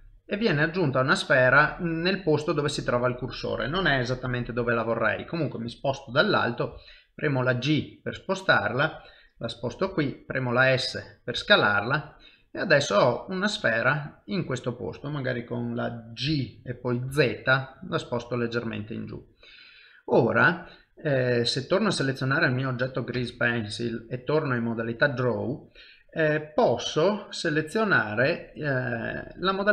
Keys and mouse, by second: 0.0 ctrl+middle click, 0.5 middle click, 5.0 KP_7, 6.7 g, 11.9 middle click, 13.7 ctrl+middle click, 16.3 g, 18.9 middle click, 22.0 click, 23.1 ctrl+Tab, 28.3 click.